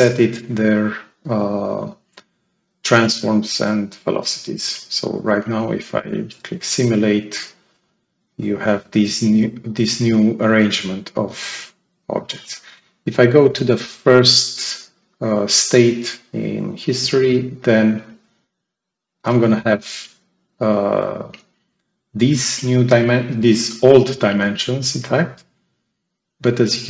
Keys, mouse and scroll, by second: 4.5 click, 5.6 click, 8.2-8.9 right drag, 8.3-8.8 drag, 10.5 click, 16.8 click, 20.6-22.5 right drag, 21.2-22.4 drag.